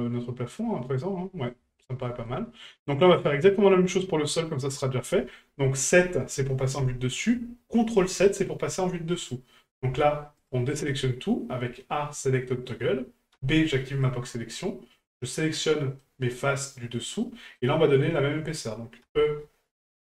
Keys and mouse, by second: 1.8 shift+middle drag, 2.2-2.9 middle drag, 3.4 middle click, 4.4 middle click, 16.0-16.6 middle drag, 17.2-17.6 middle drag.